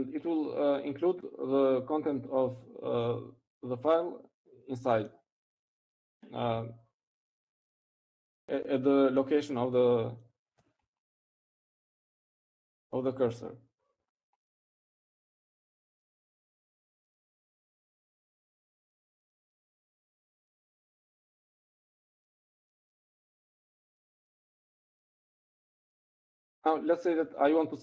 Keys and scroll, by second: 0.0-0.9 typing.